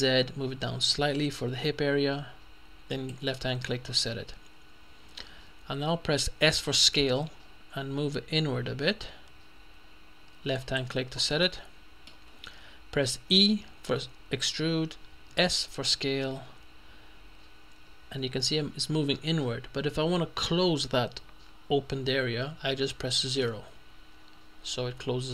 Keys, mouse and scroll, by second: 0.0 z, 3.0 click, 4.3-5.0 scroll up 1, 5.0-5.6 scroll up 1, 6.9 s, 10.6 click, 11.5-12.6 middle drag, 13.4 e, 15.4 s, 23.4 0.